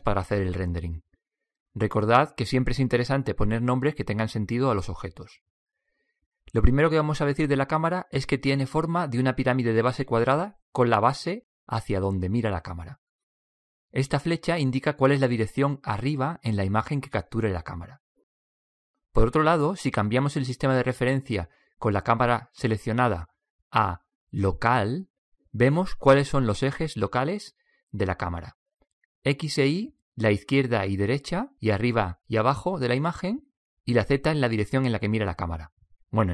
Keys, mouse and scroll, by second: 5.8-7.6 right drag, 8.3-10.0 right drag, 22.8-23.4 drag, 35.2-36.3 drag.